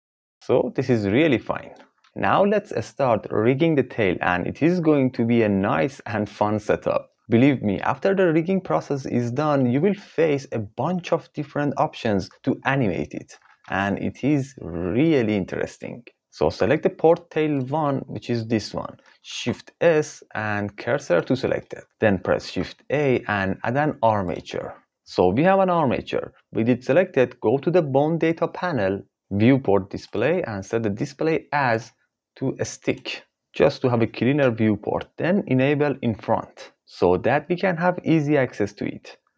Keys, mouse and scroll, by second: 13.7 ctrl+s, 16.2 ctrl+z, 19.3 shift+s, 22.4 shift+a, 30.1 click, 31.9-33.0 drag, 37.0 click.